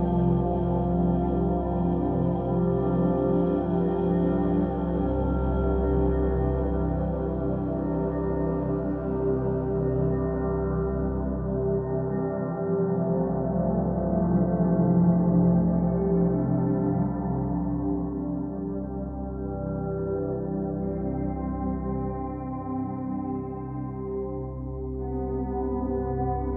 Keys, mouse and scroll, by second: 6.4-8.2 middle drag, 8.2-8.8 scroll down 2, 8.8-12.6 middle drag, 12.6-13.6 scroll up 2, 13.6-20.5 middle drag, 21.2 click, 23.1-26.1 drag.